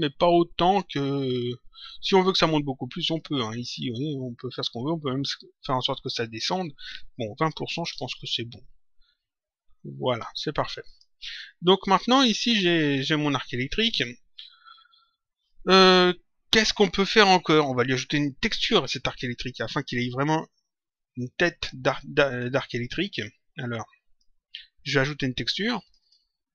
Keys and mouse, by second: 3.2 click, 6.6 click, 7.7 Return, 10.0 click, 20.2 middle click, 22.5 click, 25.7 click.